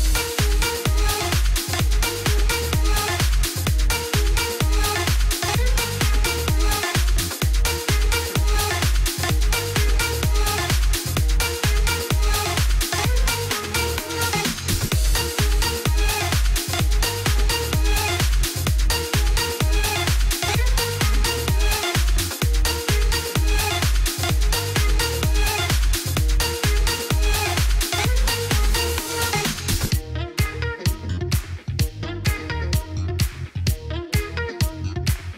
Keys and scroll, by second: 2.1-2.8 typing, 3.7 Return, 17.3 ctrl+z, 25.5-26.3 typing, 26.7 Return.